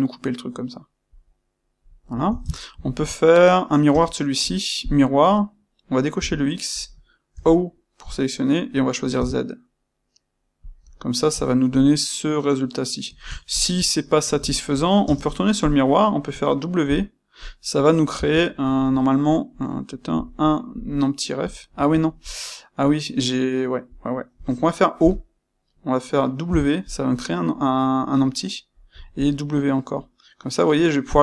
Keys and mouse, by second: 1.9 click, 2.3 ctrl+middle click, 3.8 space, 4.9 space, 8.0 click, 10.8-14.9 middle drag, 14.9 space, 15.6 space.